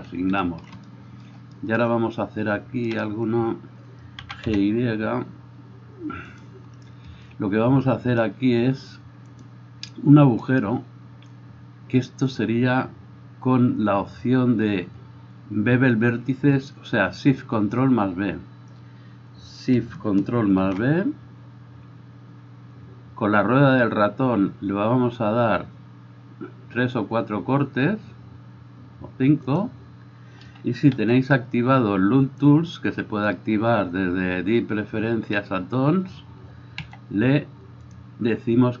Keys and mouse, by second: 3.0 middle click, 3.0 right click, 4.4 g, 6.5-9.4 middle drag, 9.4-29.7 drag, 29.7-38.8 middle drag, 31.0 w, 36.9 w.